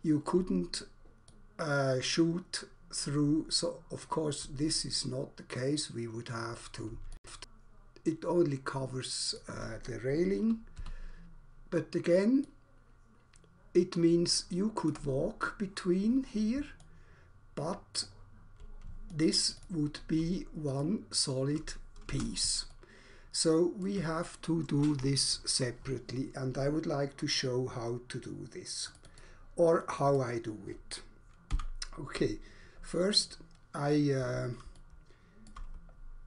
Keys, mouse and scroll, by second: 1.4 alt+click, 7.2 alt+click, 9.4 click, 10.7 w, 12.4 click, 14.9 click, 16.9 alt+click, 20.7 alt+click, 22.0 space, 22.7 alt+click, 28.9 click, 29.0 click, 29.2 double click, 29.9 double click, 30.0 double click, 30.2 double click, 31.6 Delete, 33.2-33.9 scroll down 1, 33.9-34.2 scroll up 1, 34.7 alt+shift+click.